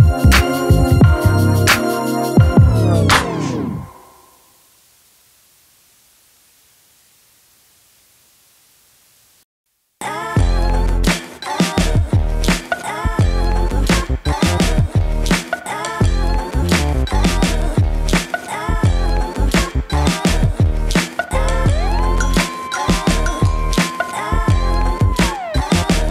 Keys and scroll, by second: 2.5 ctrl+z, 2.7 ctrl+z, 6.1-7.1 typing, 9.7 ctrl+t.